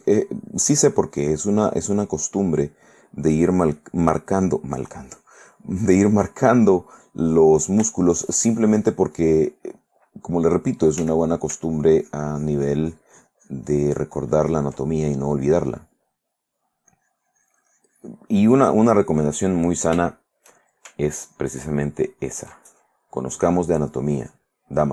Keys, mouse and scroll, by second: 0.6-2.5 drag, 2.6 click, 4.5 click, 4.9-6.9 drag, 7.2 middle click, 7.9 shift+middle click, 8.2 shift+middle click, 9.4 middle click, 11.2 f, 11.4 click, 11.9-15.0 ctrl+drag, 15.2 ctrl+middle click, 15.8-17.0 ctrl+drag, 17.1-18.9 ctrl+drag, 19.9 shift+middle click, 20.5 shift+middle click, 21.3 ctrl+click, 21.9 ctrl+click, 22.3 ctrl+click, 22.9 ctrl+middle click, 23.9-24.9 drag.